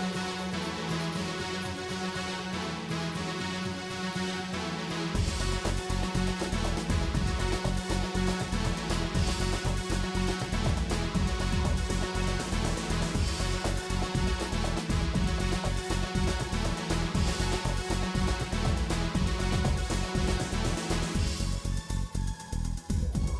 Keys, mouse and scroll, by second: 0.0 click, 0.6 f, 0.8 shift+click, 1.2 f, 1.4 shift+click, 1.6 f, 1.9 ctrl+z, 2.0 middle click, 2.2 shift+click, 2.6-7.8 typing, 2.8 shift+click, 3.3 shift+click, 3.9 shift+click, 4.6 shift+click, 5.2 shift+click, 5.7 shift+click, 6.1 shift+middle click, 6.3 shift+click, 6.9 shift+click, 7.6 shift+click, 8.0 shift+click, 8.9 f, 9.0 shift+middle click, 9.5 shift+click, 9.9 f, 10.0 shift+click, 10.4 middle click, 10.7 f, 10.8 shift+click, 11.1 f, 11.2 click, 11.5 middle click, 12.1 shift+click, 12.2-15.1 typing, 12.4 shift+click, 12.9 shift+click, 13.4 shift+middle click, 13.6 shift+click, 14.1 shift+click, 14.5 click, 14.7 shift+middle click, 14.9 shift+click, 15.3 middle click, 15.9 scroll down 1, 16.0 middle click, 17.6-19.8 middle drag, 20.2 alt+click, 20.9 g, 21.8-22.9 middle drag, 22.9 alt+click, 23.1 g.